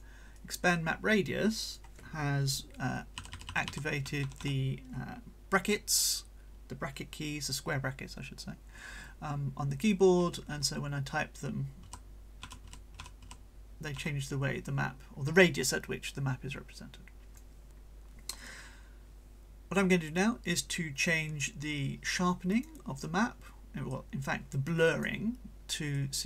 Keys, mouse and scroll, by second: 0.4-1.9 right drag, 3.2 [, 4.0 ], 10.2 ], 11.8-13.9 typing, 16.0-17.6 drag, 20.1-22.9 drag, 23.9-25.2 drag, 25.9-26.2 drag.